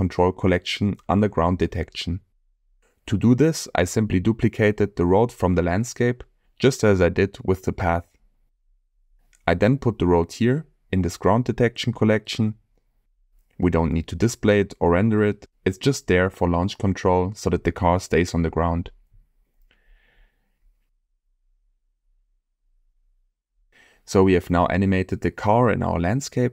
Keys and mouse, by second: 1.5 drag, 2.4 click, 3.0 middle click, 4.1-5.4 shift+middle drag, 5.8-6.3 middle drag, 6.9 shift+middle click, 7.5-9.3 middle drag, 9.6-9.9 shift+middle drag, 15.3-15.6 drag, 18.0-18.3 drag, 18.8 click, 22.4 space.